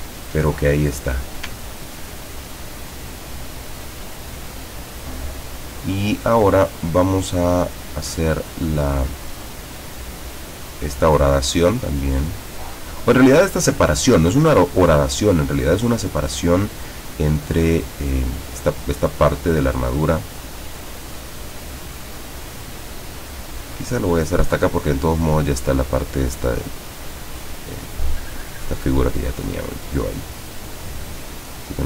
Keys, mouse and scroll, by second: 0.1 ctrl+scroll down 2, 0.5-1.3 ctrl+middle drag, 2.0-3.2 ctrl+drag, 3.9 ctrl+scroll down 2, 12.1 click, 19.8 click, 28.2 click, 31.3 click.